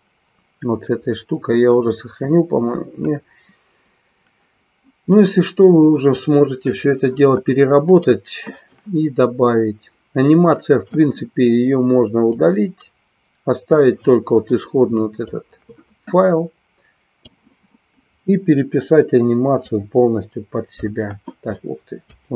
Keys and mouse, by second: 7.8 click, 12.3-13.8 drag, 15.3-17.2 drag, 19.7 Delete.